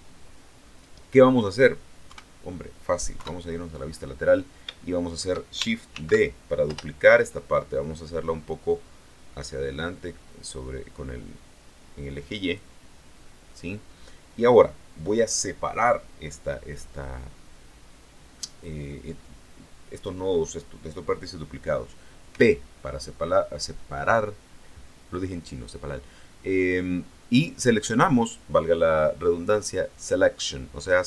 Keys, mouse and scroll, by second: 0.6 middle click, 1.3 scroll up 1, 2.0 KP_1, 3.0 KP_3, 4.3-4.7 scroll down 1, 4.7 shift+middle click, 5.8 shift+d, 6.6 Return, 8.6-12.6 drag, 22.2 p.